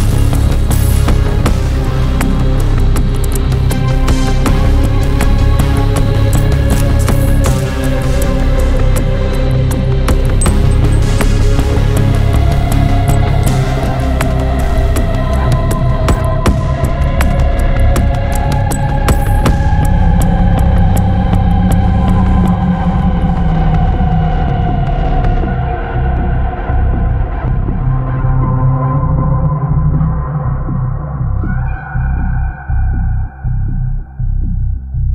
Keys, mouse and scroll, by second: 0.0 click, 2.3 click, 3.8 click, 5.5 ctrl+click, 6.7 ctrl+click, 7.3 ctrl+scroll down 1, 8.5 ctrl+click, 10.7 click, 12.0 click, 18.2 scroll down 2, 18.6-19.0 scroll up 2, 19.2 click, 21.9 click, 22.9 scroll up 1, 23.5 scroll down 1, 24.0-25.2 drag, 25.5 scroll down 2, 25.9 scroll up 2, 27.0 click, 28.4 click, 28.8 click, 29.7 click, 30.6 click, 32.4-32.9 scroll up 2, 33.2-33.5 scroll down 1, 34.2 click, 34.9-35.1 scroll up 1.